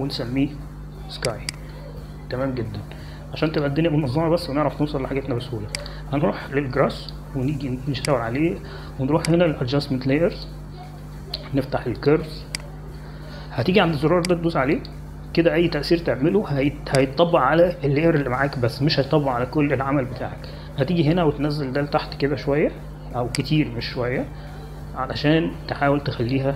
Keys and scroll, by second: 2.6-4.0 typing.